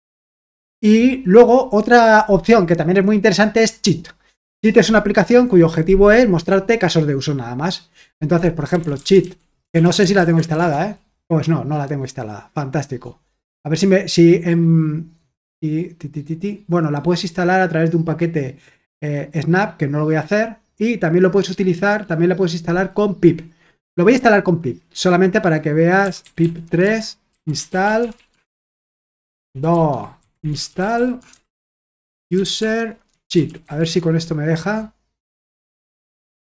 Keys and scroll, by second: 8.5-10.8 typing, 25.7-34.1 typing, 29.5 ctrl+w, 29.7 ctrl+w.